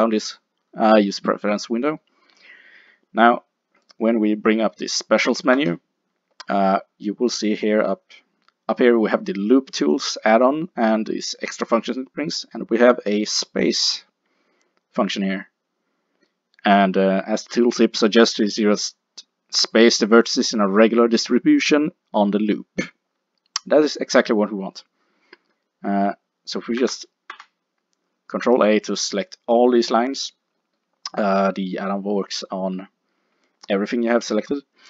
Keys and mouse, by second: 5.6 w, 26.9 a, 27.4-30.6 middle drag, 27.4 a, 33.1-34.1 middle drag.